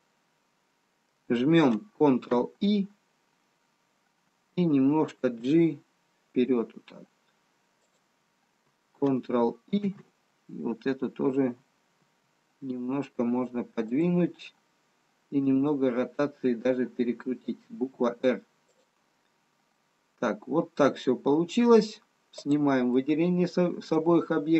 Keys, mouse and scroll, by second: 2.4 ctrl+i, 10.0 ctrl+i, 12.1 g, 20.0 middle click.